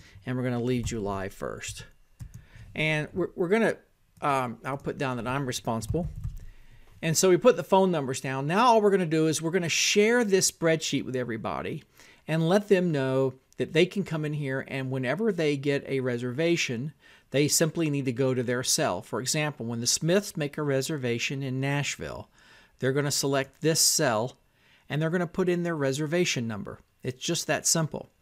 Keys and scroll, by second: 0.0-17.3 typing, 19.0 j, 20.0 o, 20.8 h, 21.7 n, 22.5 Tab, 23.3-28.2 typing.